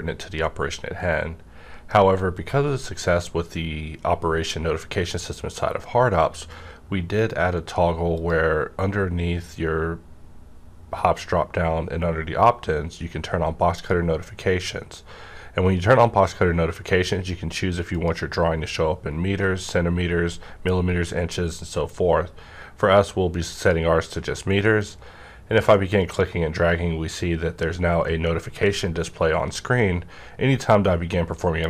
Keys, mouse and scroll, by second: 1.0 right click, 1.0-3.5 drag, 8.1 click, 8.1 right click, 15.8 click, 18.2 click, 23.5-31.6 drag.